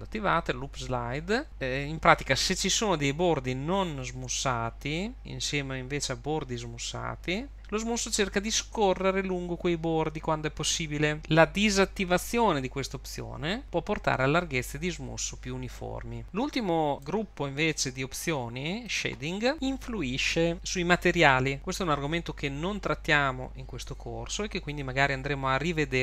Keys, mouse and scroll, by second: 16.4 click, 16.4-17.0 scroll down 4, 17.0 click, 17.8-18.9 scroll down 2, 18.9 click, 19.4 scroll down 6.